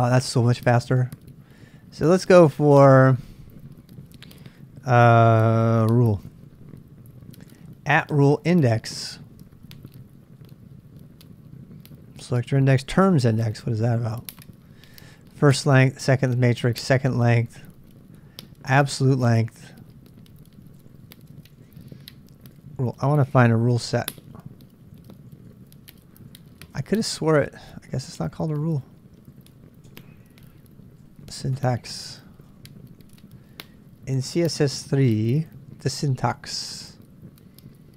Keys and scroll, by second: 0.6 space, 4.5 /, 5.6-6.6 typing, 10.4 k, 12.9 k, 13.2 l, 16.4-33.9 typing, 35.3-37.9 typing.